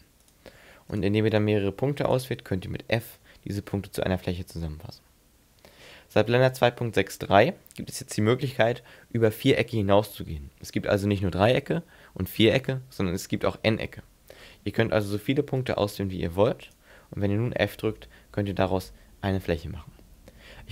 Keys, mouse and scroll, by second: 0.2 right click, 1.0 shift+right click, 1.3 right click, 2.1 shift+right click, 3.1 f, 6.2 ctrl+z, 15.1 shift+right click, 15.6 shift+right click, 16.6 shift+right click, 17.9 f, 19.8 middle click.